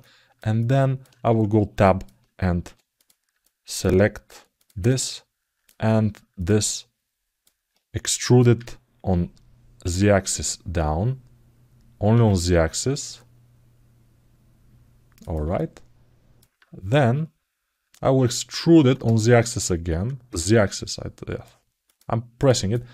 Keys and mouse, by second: 0.1 alt+middle click, 0.3 alt+middle click, 0.6 alt+middle click, 3.2 alt+middle click, 4.6 alt+middle click, 6.1 shift+click, 6.5 alt+middle click, 15.3 alt+middle click, 22.1 click, 22.5 alt+middle click.